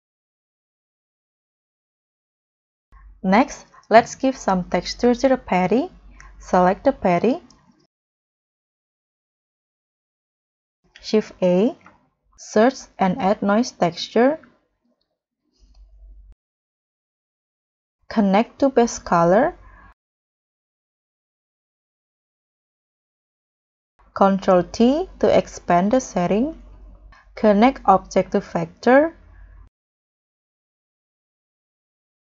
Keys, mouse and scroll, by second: 2.6 scroll down 1, 2.6 scroll up 3, 2.8 scroll down 13, 6.1-6.9 scroll down 9, 6.9-8.0 scroll up 12, 11.1 shift+a, 12.6-13.0 typing, 16.0-16.4 scroll up 2, 19.8-20.4 scroll down 7, 20.4-20.8 scroll up 3, 21.2 scroll up 3, 22.2 scroll up 1, 22.2 double click, 24.0 scroll up 1, 24.7 scroll up 1, 25.0 ctrl+t, 25.6-26.0 scroll down 5, 26.0-26.8 scroll up 10, 29.3-30.5 scroll down 10, 30.5-30.9 scroll up 6.